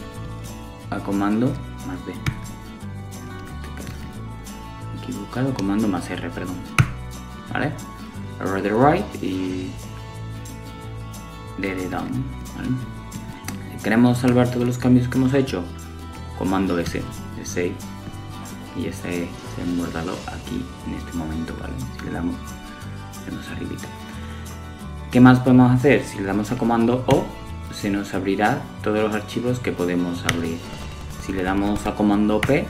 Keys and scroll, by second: 13.1 super+s, 24.5 super+o, 30.7 super+p.